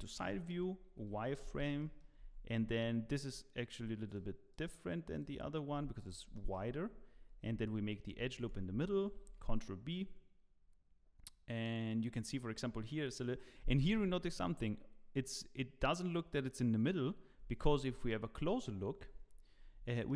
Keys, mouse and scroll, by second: 0.9 z, 1.5 scroll up 3, 1.8 shift+middle click, 2.2 Tab, 2.5-3.0 scroll up 3, 3.1 scroll down 1, 3.4 shift+middle click, 4.1 click, 4.5 click, 5.2 click, 5.7 Tab, 6.0 scroll up 2, 6.3 shift+middle click, 7.3 ctrl+r, 9.2 ctrl+b, 19.0 ctrl+z, 19.5 scroll up 1.